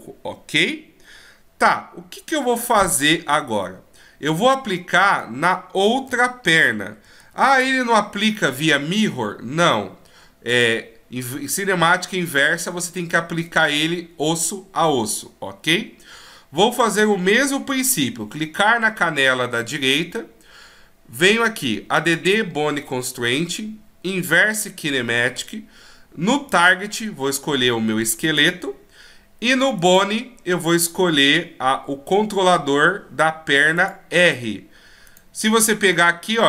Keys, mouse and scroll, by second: 5.9 a, 6.1 a, 7.2 alt+r, 7.5 alt+g, 10.5 right click, 12.4 middle click, 22.0 click, 26.5 click, 29.8 click, 35.1 right click, 35.9 g.